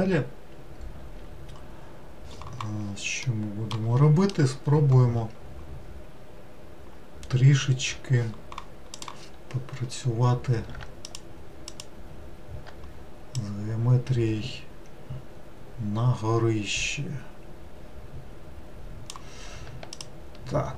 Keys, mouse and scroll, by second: 3.3 middle click, 3.9-7.0 scroll down 2, 11.1 alt+click, 13.4 click, 20.0 alt+click.